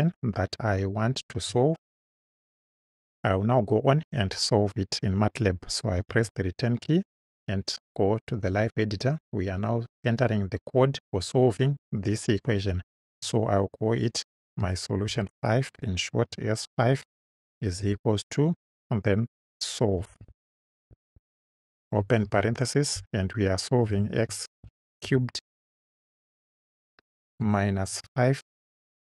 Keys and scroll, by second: 5.9 Return, 15.1 shift+s, 16.3 5, 17.8 =, 19.8-22.3 typing, 23.9 x, 24.6 shift+6, 25.1 shift+3, 25.7 3, 27.4 -, 27.9 5.